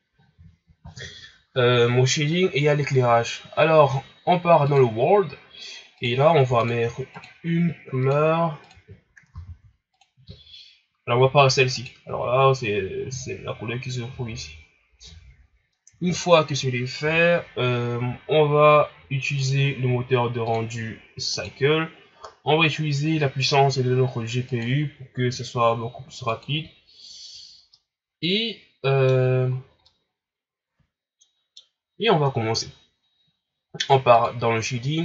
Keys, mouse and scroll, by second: 4.6 click, 6.0 click, 7.1 click, 11.7 click, 16.5 scroll down 4, 19.4 click, 20.4-23.5 drag, 24.4-27.5 drag, 27.7-29.5 middle drag, 29.5-29.8 scroll up 5, 29.8-32.8 middle drag.